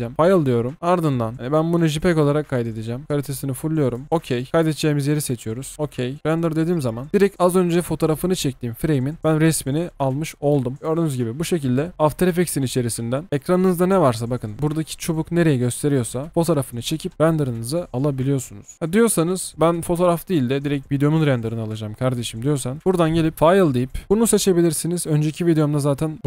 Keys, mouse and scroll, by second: 10.8 double click, 11.9 scroll down 2, 18.7 space.